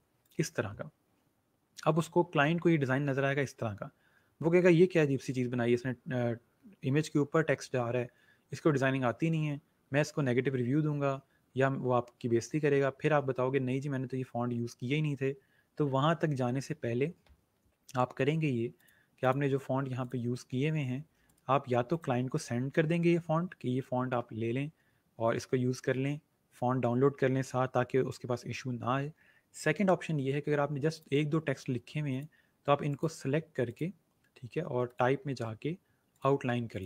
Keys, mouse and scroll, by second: 17.4 ctrl+z, 18.7 click, 21.1 right click, 21.8 click, 30.9 click.